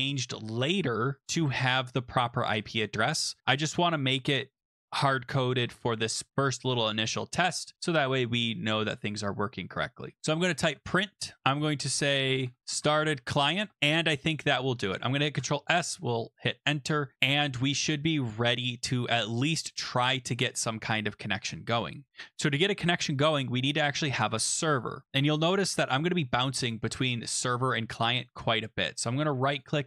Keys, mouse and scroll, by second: 1.4 click, 3.4 click, 6.0 click, 10.1-14.2 typing, 15.4 Return, 25.2 click, 28.3 right click, 29.6 click.